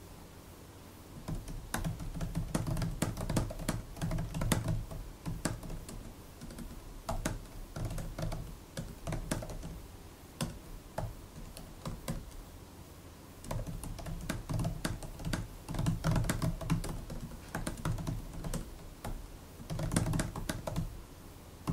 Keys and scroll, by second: 0.9-12.0 typing, 6.3 Return, 6.5 Return, 13.3-21.7 typing.